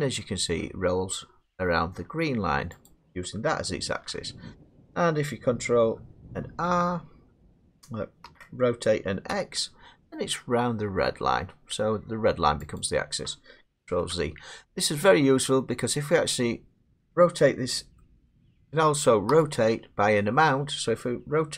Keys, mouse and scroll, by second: 2.9 click, 3.9 ctrl+z, 6.5 ctrl+r, 8.3 r, 9.3 x, 12.8 click, 13.9 ctrl+z, 17.2 middle click, 18.9 middle click, 19.3 r.